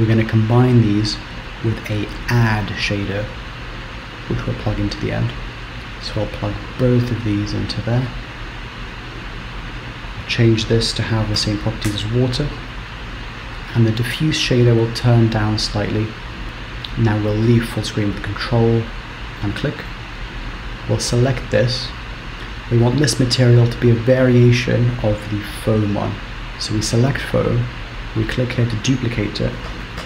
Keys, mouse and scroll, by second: 17.8 ctrl+space, 19.6 middle click, 21.0 click, 23.8 click, 28.1 click, 28.7 click.